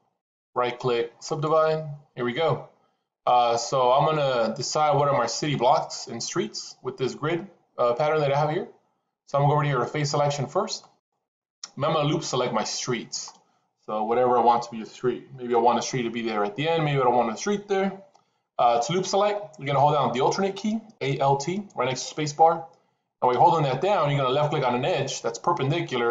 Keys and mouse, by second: 0.1-1.3 right drag, 10.8 click.